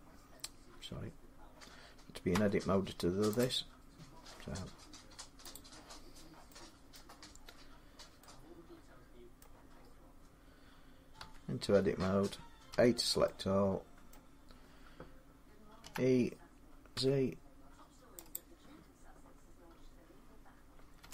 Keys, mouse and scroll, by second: 2.1 Tab, 3.2-6.5 drag, 6.8 middle click, 9.2 middle click, 9.6 scroll down 4, 11.0 Tab, 12.5 middle click, 12.5 a, 13.9 middle click, 15.7 e, 16.8 z, 18.1 middle click, 18.2-21.1 drag, 20.8 e.